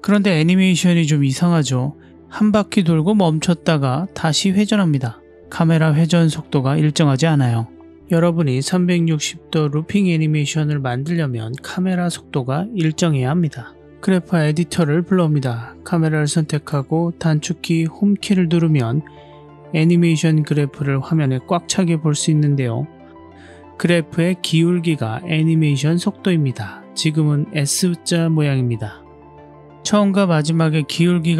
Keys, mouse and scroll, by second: 0.6 s, 8.1 click, 10.0 ctrl+alt+q, 17.2 click, 20.9-31.3 drag.